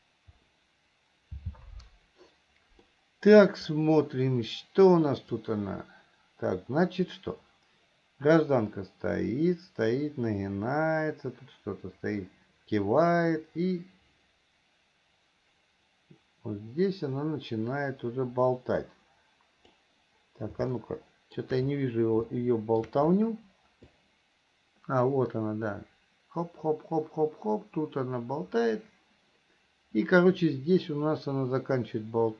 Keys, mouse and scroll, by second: 3.2 middle click, 5.8-20.2 drag, 21.0 shift+middle click, 22.6 shift+middle click, 24.3-32.3 drag.